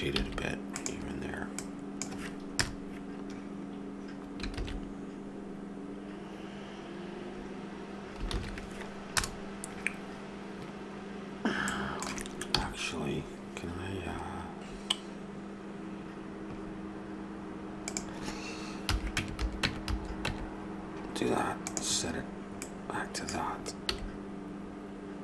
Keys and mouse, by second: 0.2 s, 1.5 click, 2.5 KP_0, 4.8 shift+z, 8.5 shift+z, 9.1 KP_0, 12.5 n, 22.6-24.6 drag, 23.9 s.